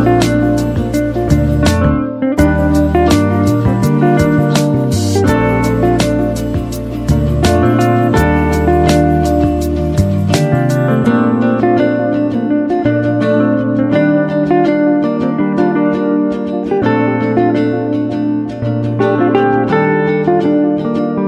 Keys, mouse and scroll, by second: 0.0-0.9 typing, 2.9 click, 6.9 ctrl+w, 10.7 ctrl+w, 11.7 click, 12.2 typing, 19.0 typing.